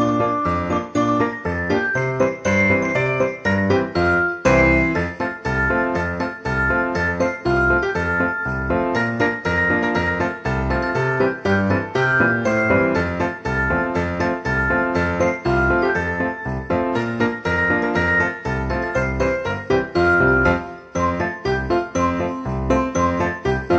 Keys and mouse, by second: 0.5 middle click, 1.5 g, 1.5 z, 2.8 click, 4.2 ctrl+a, 5.0 shift+middle click, 5.7 KP_1, 6.9 shift+d, 7.5 z, 9.2 click, 9.7 s, 10.0 right click, 11.2 click, 12.4 s, 13.3 click, 13.8 KP_7, 15.0 r, 16.2 click, 16.4 KP_1, 17.8 g, 18.7 click, 19.1 shift+d, 19.7 z, 20.2 click, 20.9 s, 21.1 click, 21.3 g, 21.7 z, 22.5 click, 23.3 KP_7.